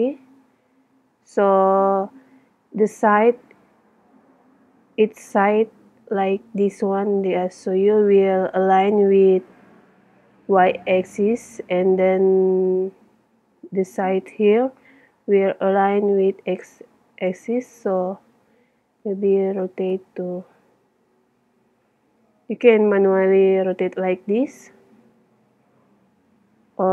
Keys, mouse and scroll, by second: 19.1 r.